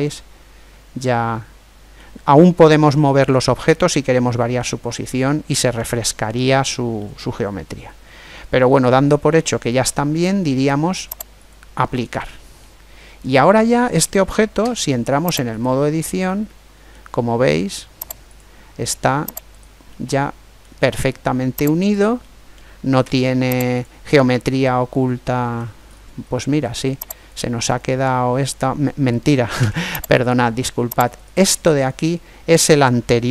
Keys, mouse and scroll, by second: 2.4-4.2 middle drag, 6.7-8.5 middle drag, 11.1-12.9 drag, 12.3-14.2 middle drag, 14.3 Tab, 15.8 middle click, 17.4 middle click, 18.0 click, 19.3 right click, 21.0 middle click, 21.2 click, 21.4 middle click, 21.6 right click, 22.8 z, 23.4 middle click, 24.1-27.0 middle drag, 27.0 right click, 27.9 click, 28.8 middle click, 29.4 Tab, 29.7 middle click, 30.9 right click, 32.9-33.3 middle drag.